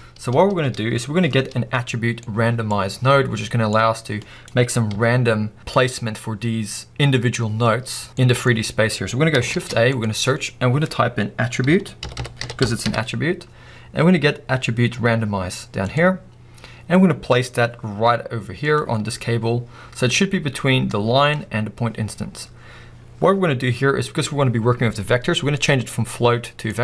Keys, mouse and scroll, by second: 5.6 middle click, 17.5-18.7 middle drag, 18.8-23.2 drag.